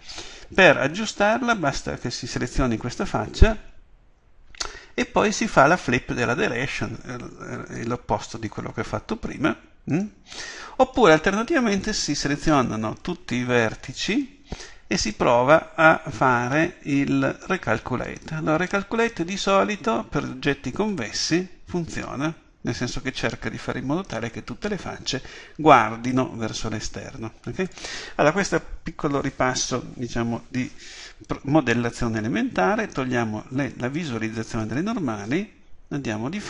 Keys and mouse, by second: 8.5-11.7 drag, 18.0-22.5 drag, 26.7 click, 35.9 KP_7.